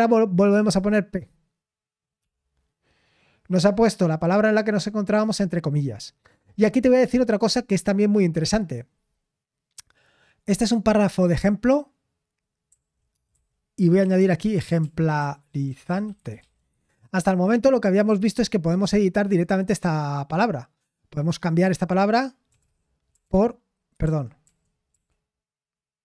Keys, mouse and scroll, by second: 14.1-18.0 typing, 23.8-24.9 typing.